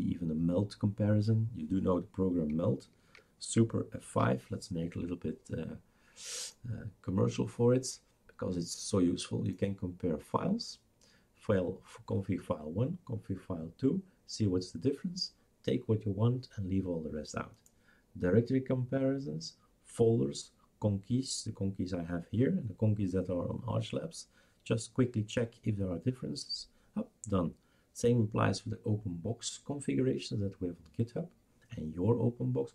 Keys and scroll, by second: 4.0 super+F5.